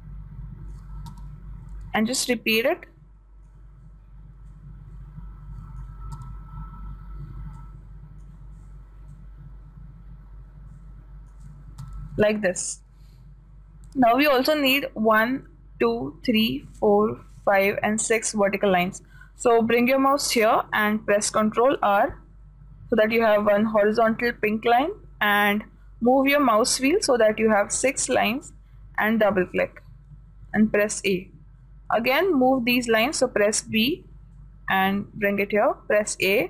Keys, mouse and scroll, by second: 0.3-2.2 drag, 1.5 a, 2.2 b, 5.0-7.2 drag, 6.6 a, 7.7 b, 9.6-11.5 drag, 12.3 a, 22.1 ctrl+r, 30.9 a, 32.6 b, 34.8-36.4 drag.